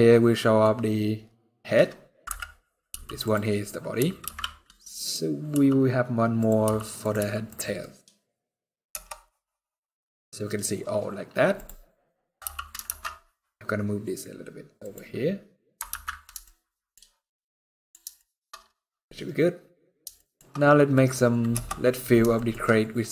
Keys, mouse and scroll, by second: 0.1 middle click, 0.8 scroll up 2, 2.0 KP_7, 2.6 g, 3.9 alt+d, 5.2 r, 6.3 g, 6.9 r, 7.5 middle click, 8.6 KP_0, 9.4-9.7 scroll up 9, 10.9 scroll down 5, 11.2 click, 11.7 scroll down 3, 12.1 g, 15.8 ctrl+s, 16.1 shift+middle click, 17.0 middle click, 17.8 shift+middle click, 18.2 scroll up 3, 18.5 middle click, 19.9 shift+middle click, 20.1-20.5 shift+scroll down 1, 20.5 middle click, 20.7 scroll down 1, 21.2 KP_0, 22.0 shift+scroll down 1, 22.0 shift+middle click, 22.2-22.7 shift+scroll up 5.